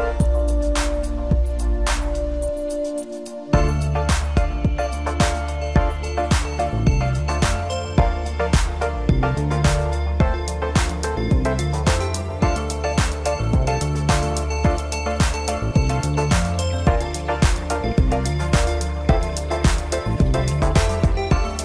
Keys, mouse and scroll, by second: 0.6 click, 0.9 click, 4.2 Tab, 4.5-5.1 scroll up 1, 5.1 click, 5.4 click, 5.8 KP_7, 6.1 scroll down 1, 6.4 ctrl+KP_2, 6.8-7.2 scroll up 1, 7.2 ctrl+r, 8.4 3, 8.5 click, 9.1-10.2 drag, 10.4 click, 10.6 scroll down 3, 10.7-11.1 middle drag, 11.1 click, 11.2 scroll up 2, 11.4 middle click, 11.9 click, 12.0 scroll up 6, 12.4 Tab, 12.5 scroll down 4, 12.6-13.2 middle drag, 13.3-13.8 scroll up 4, 13.8 click, 14.1 scroll down 4, 14.1-14.6 middle drag, 15.5 KP_Divide, 16.1 click, 16.4 click, 17.7 click, 18.0 drag, 18.3-20.1 drag, 20.2 Tab, 20.7 scroll down 3, 21.0 KP_7.